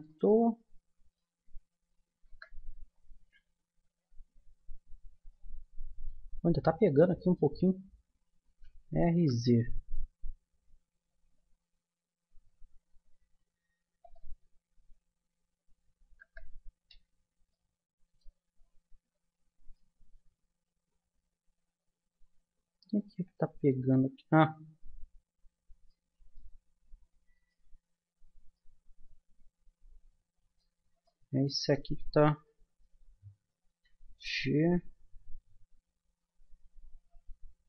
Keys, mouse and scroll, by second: 0.4 middle click, 2.2 KP_0, 3.5 middle click, 3.5 scroll up 1, 7.3-11.7 middle drag, 8.5 r, 14.8-17.2 middle drag, 16.2 KP_0, 17.5-18.7 middle drag, 19.4-21.5 middle drag, 25.2-27.4 middle drag, 27.4-29.0 right drag, 29.0-30.5 middle drag, 29.1 click, 31.0-33.7 middle drag, 33.7 g.